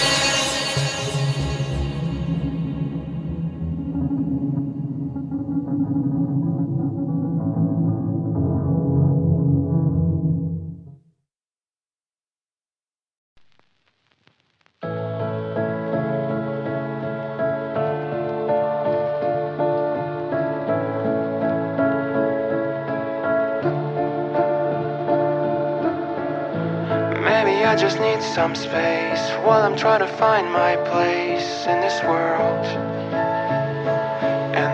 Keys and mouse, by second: 1.9 click, 3.9 KP_Decimal, 6.4 click, 7.0-11.0 drag, 12.9 KP_Decimal, 13.8 click, 14.1 x, 14.6 ctrl+middle click, 15.0 middle click, 15.6 shift+a, 16.7 f, 18.7 ctrl+shift+click, 18.9 shift+a, 21.3 click, 21.7 click, 22.1 shift+a, 25.6 click, 27.5-31.0 drag, 33.0 click.